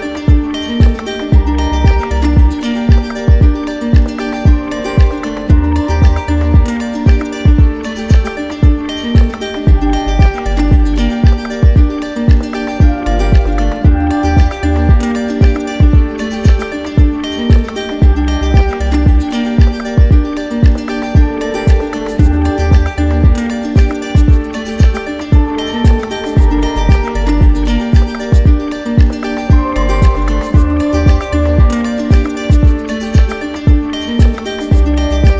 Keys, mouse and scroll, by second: 1.3 click, 2.8 click, 8.0 click, 8.6 click, 8.9 z, 9.8 click, 11.1 click, 12.6 click, 14.1 click, 15.9 click, 21.4 w, 27.6 click, 31.7 click, 32.6 right click.